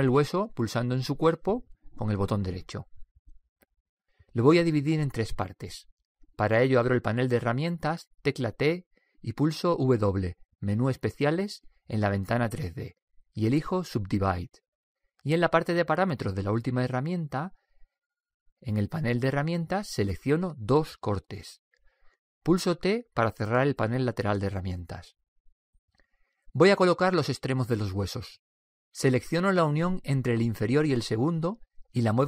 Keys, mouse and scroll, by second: 1.2 right click, 8.8 t, 11.3 w, 21.3-23.1 drag, 23.2 click, 23.6 t, 25.1-27.0 drag, 30.6-32.2 right drag.